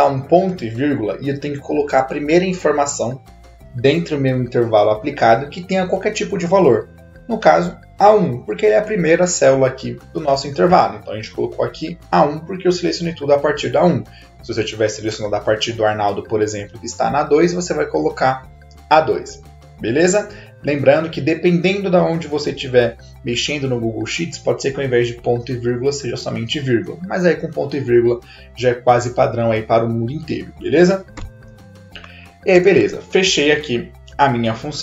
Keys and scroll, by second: 0.5 /, 7.8-8.7 typing, 32.5 shift+0.